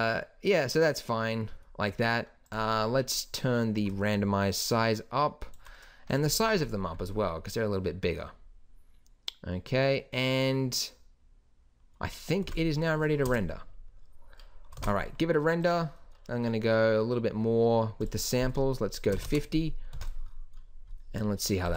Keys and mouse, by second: 1.1 middle click, 2.5-5.5 middle drag, 6.1-8.4 middle drag, 8.4 click, 12.4 ctrl+s, 13.3 KP_0, 14.8 ctrl+s, 20.0 ctrl+s.